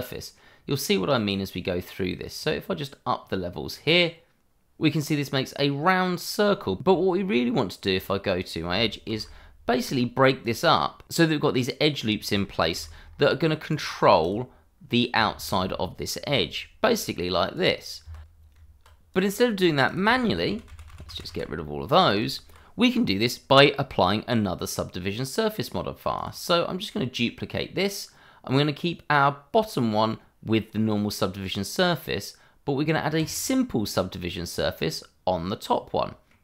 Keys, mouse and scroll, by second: 2.3 click, 4.8 middle click, 7.9 Tab, 9.0 ctrl+r, 9.6-10.4 scroll up 1, 10.4 click, 11.2 Escape, 11.5 middle click, 13.9-14.2 scroll up 1, 14.2 click, 15.1 middle click, 16.2 ctrl+r, 16.8-17.4 scroll up 1, 17.5 click, 18.0 Escape, 18.5 Tab, 19.1 click, 20.2 ctrl+z, 22.2 Tab, 26.1 click, 33.1 click, 34.4-34.7 scroll down 1, 34.7 middle click.